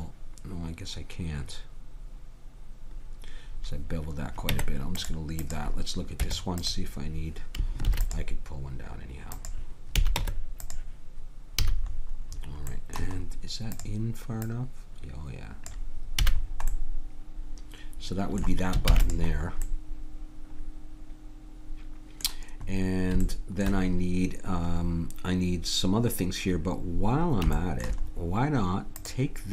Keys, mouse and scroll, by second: 4.5 Tab, 6.2 Tab, 7.8 ctrl+r, 10.0 a, 10.2 Tab, 11.6 a, 13.7-15.2 drag, 16.2 a, 18.9 ctrl+s, 22.7-29.0 middle drag, 29.0-29.5 drag.